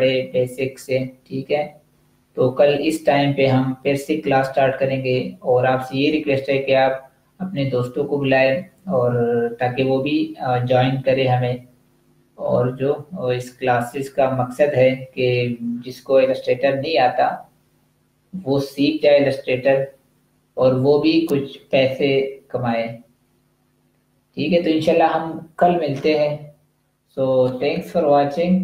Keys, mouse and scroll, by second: 28.4 click.